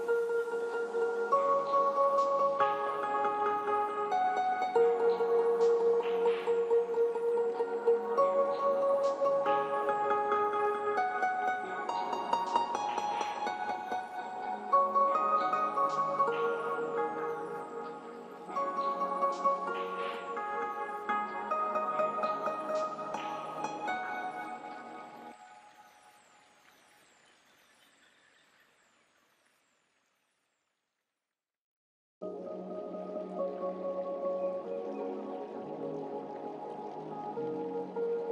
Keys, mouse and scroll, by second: 0.5-0.8 scroll down 1, 1.0 click, 10.1-14.6 drag, 14.6-15.2 scroll up 1, 16.0 click, 21.5 right click, 22.0 click, 22.6 scroll up 1, 26.4 click, 26.8 Delete, 27.2 scroll down 1, 29.3 click, 30.7 g, 32.7-38.0 drag.